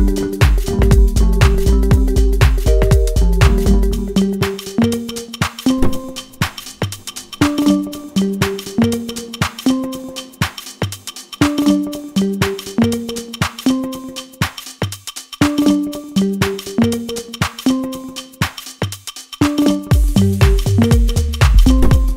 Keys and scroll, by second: 6.9 ctrl+space, 19.1 ctrl+space.